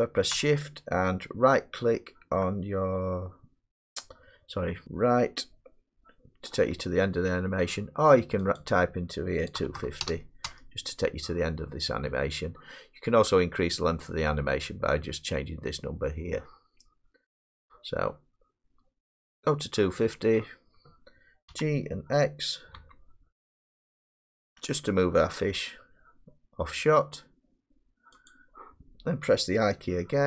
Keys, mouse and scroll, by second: 4.9 Right, 9.6-10.0 typing, 10.5 Return, 21.5 g, 22.8 x, 28.3-30.2 drag.